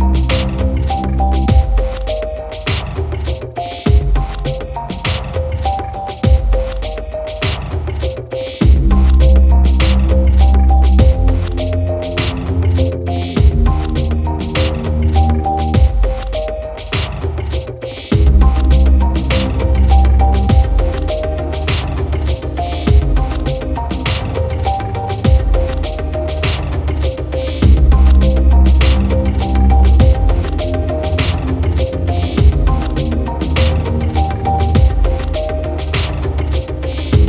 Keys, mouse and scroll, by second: 0.0 shift+c, 1.1 g, 2.0 click, 3.3 e, 4.6 click, 6.2 e, 7.0 click, 8.8 e, 10.0 click, 12.6 Tab, 15.2 click, 17.7 click, 18.3 click, 20.1 drag, 23.7 click, 26.0 click, 26.1 click, 26.3 click, 27.1-28.6 drag, 29.0 click, 32.7 Tab, 33.4 a, 35.9 r, 36.1 y, 36.7 9, 36.7 0, 37.1 Return.